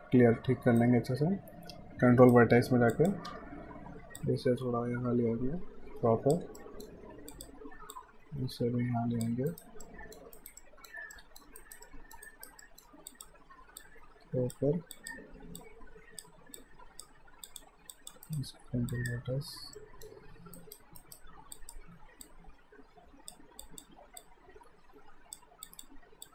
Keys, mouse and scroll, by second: 0.8 right click, 2.9 click, 3.3 w, 4.2 click, 6.6 alt+middle click, 7.3 click, 9.5 alt+right click, 9.8 alt+middle click, 10.4 alt+right click, 10.6 alt+middle click, 11.6 alt+right click, 11.9 alt+middle click, 12.3 alt+right click, 12.6 middle click, 13.1 click, 18.3 right click, 18.9 click, 19.7 middle click, 20.5 alt+right click, 21.5 click.